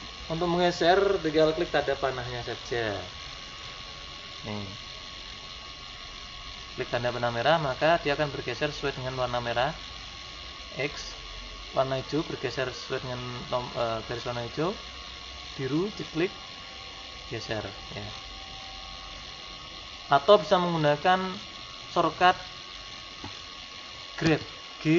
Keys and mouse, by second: 3.5-5.2 right drag, 5.1-6.7 drag, 11.7-13.2 drag, 15.8-17.5 drag, 21.8-23.6 drag, 24.3 g.